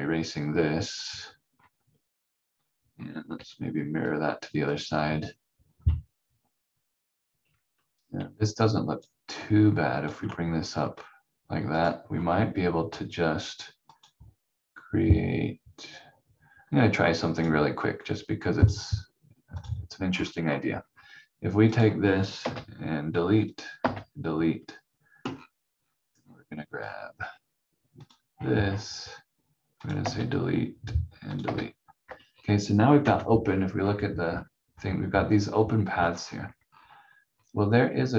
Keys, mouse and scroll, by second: 1.5-3.2 scroll up 1, 3.3 m, 4.7 click, 8.2 v, 8.8 click, 12.1 scroll up 1, 13.9 click, 17.3 click, 20.0-21.7 scroll up 1, 21.7 click, 22.4 Delete, 23.5 click, 23.8 Delete, 25.3-25.9 scroll down 1, 26.8 scroll up 1, 28.0 click, 28.3-28.8 scroll up 1, 29.8 click, 30.0 Delete, 31.3 click, 31.4 Delete, 32.2-33.0 scroll down 1, 33.0 v, 33.4-34.0 scroll up 1, 34.2-36.8 scroll down 1.